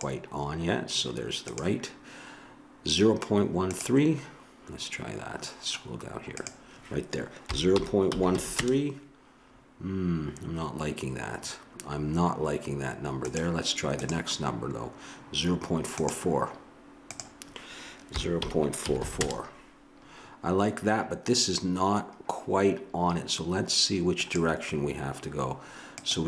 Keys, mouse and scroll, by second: 6.3-8.6 drag, 17.1-19.0 drag, 19.0 4, 21.6 middle click, 24.2-26.2 drag.